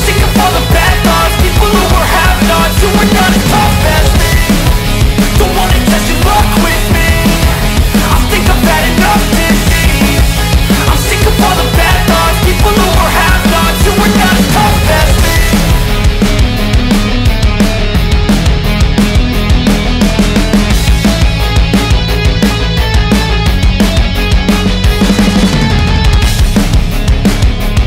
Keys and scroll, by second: 12.8 alt+BackSpace, 22.9 alt+BackSpace.